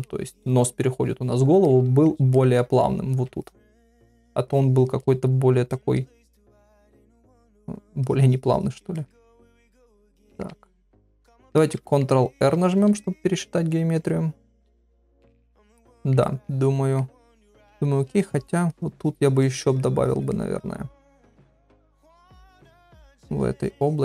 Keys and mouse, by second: 1.7 ctrl+middle click, 2.4 ctrl+middle click, 3.4 shift+click, 3.6 shift+click, 3.9 middle click, 4.5 shift+click, 5.0 middle click, 5.7 shift+click, 6.7 click, 7.4 middle click, 8.1 click, 9.0 middle click, 9.4 shift+click, 10.1 middle click, 10.8 shift+click, 11.0 shift+click, 11.6 ctrl+middle click, 11.9 middle click, 12.5 ctrl+r, 14.0 middle click, 15.0 click, 15.2 click, 15.5 middle click, 16.0 ctrl+middle click, 16.2 middle click, 17.4 ctrl+middle click, 18.2 click, 18.7 click, 19.0 click, 19.4 click, 20.0 click, 20.3-21.3 middle drag, 22.1 click, 22.5 middle click, 22.9 ctrl+middle click, 23.4 click, 23.6 click, 23.8 click.